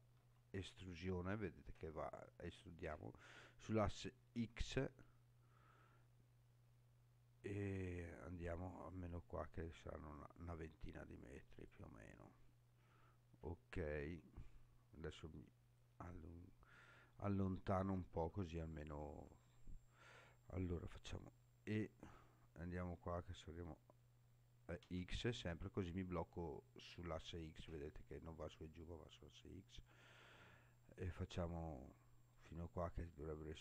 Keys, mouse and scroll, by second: 0.1 e, 4.3 x, 11.5 click, 12.8-14.2 scroll down 4, 14.2-14.6 scroll down 2, 15.3-16.1 scroll down 1, 16.4-17.0 scroll down 1, 17.0-18.2 scroll down 1, 18.3 shift+middle click, 19.5-20.1 scroll down 1, 21.0 e, 24.8 x, 32.3 click, 33.1-33.6 scroll down 2.